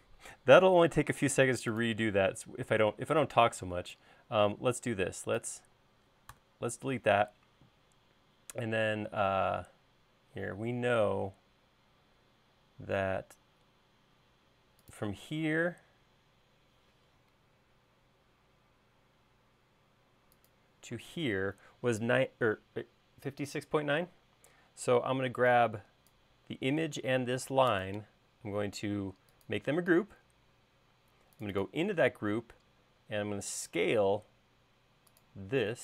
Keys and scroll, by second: 6.4 BackSpace, 7.6 l, 21.0 space.